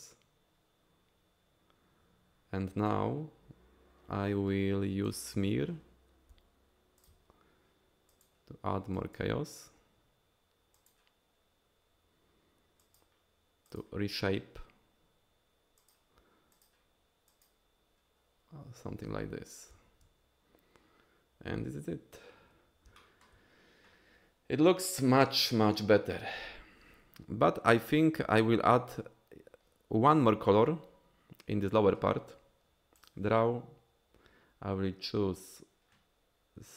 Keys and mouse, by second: 5.1 click, 6.3 f, 7.0 f, 8.1 click, 8.9 click, 10.7 click, 12.8 click, 13.7 click, 15.8 click, 16.5 click, 17.3 click, 23.0 shift+click, 33.0 click.